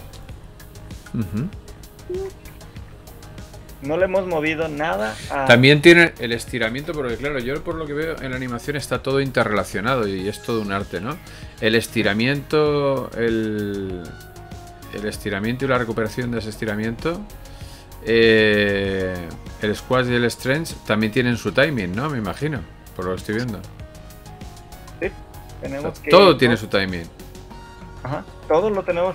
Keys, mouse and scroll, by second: 1.2 Escape, 2.0 Right, 2.6 shift+Left, 3.0 alt+a, 5.2 Escape, 6.8 right click, 9.2 click, 11.6 Delete, 13.2 right click, 15.6 click, 16.7 alt+g, 18.0 right click, 24.0 right click, 25.0 alt+a, 26.8 Escape.